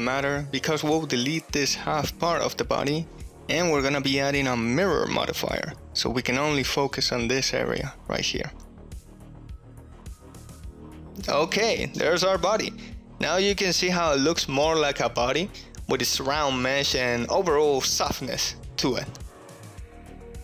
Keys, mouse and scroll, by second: 0.5 KP_1, 1.4 ctrl+middle click, 1.8 alt+z, 2.0 3, 2.4 click, 3.3 alt+z, 3.8 middle click, 4.3 x, 5.4 shift+middle click, 7.0 click, 8.0-10.1 drag, 9.7 r, 11.2 middle click, 12.3 click, 12.5 middle click, 13.0 middle click, 14.0 Tab, 15.0-16.1 middle drag, 16.3 shift+middle click, 18.0-19.2 middle drag, 19.6 middle click, 20.2 Tab.